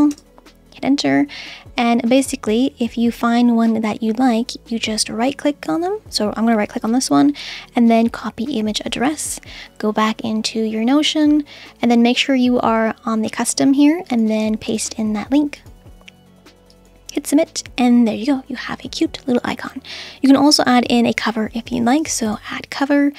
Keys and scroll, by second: 0.0-0.2 typing.